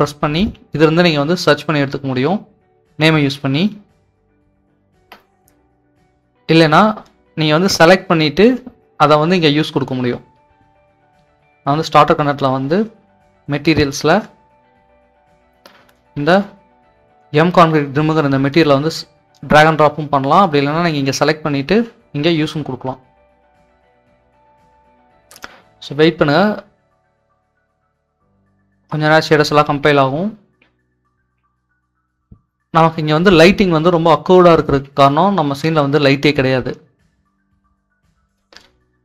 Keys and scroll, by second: 2.6 d, 4.9 BackSpace, 23.7-34.8 typing, 36.9-37.7 typing.